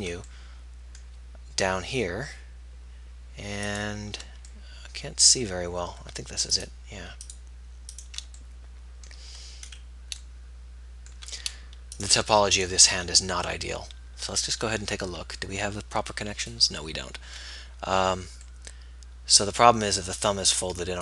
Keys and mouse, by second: 6.7-9.9 right drag, 12.1-14.6 right drag, 14.6 z, 17.8-18.8 middle drag.